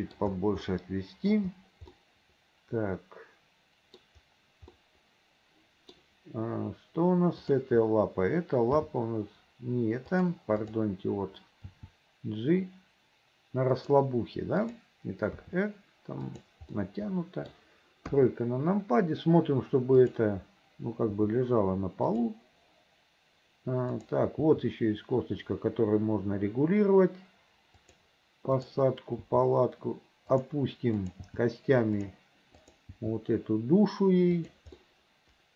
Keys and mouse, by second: 0.9 middle click, 2.2-4.2 middle drag, 5.1-6.1 middle drag, 7.7-8.9 drag, 8.9 g, 11.8 g, 14.7 click, 15.5 r, 16.9 click, 18.2 KP_3, 20.1 click, 21.6 g, 24.1 click, 24.5 g, 28.7 click, 29.4 g, 31.1 click, 31.4 g, 32.7 click, 33.1 g, 35.0-35.5 middle drag.